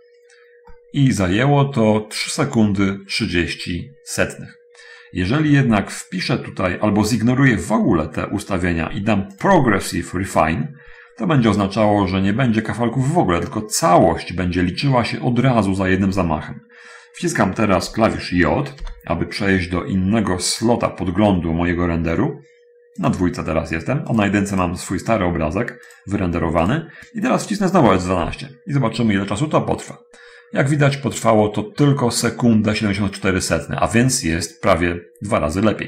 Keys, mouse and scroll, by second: 0.8 middle click, 9.4 click, 19.1 j, 20.8 click, 23.1 click, 24.4 click, 26.0 click, 27.0 click, 28.5 F12.